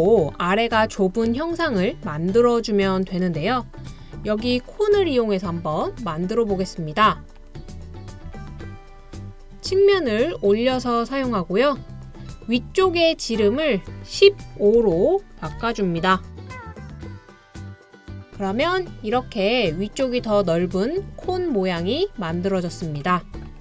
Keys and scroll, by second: 14.8-15.5 typing, 16.4 Return, 20.5 typing.